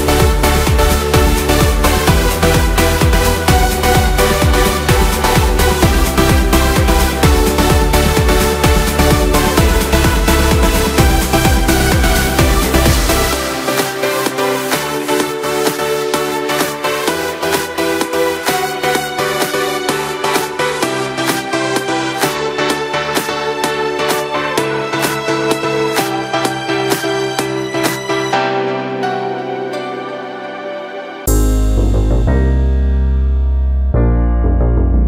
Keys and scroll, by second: 0.5 ctrl+Return, 1.2 ctrl+shift+n, 1.6 Return, 4.2 ctrl+alt+Delete, 5.2 ctrl+d, 14.0 Delete, 15.0 ctrl+d, 19.9 Return, 26.8 ctrl+alt+z, 34.5 ctrl+j.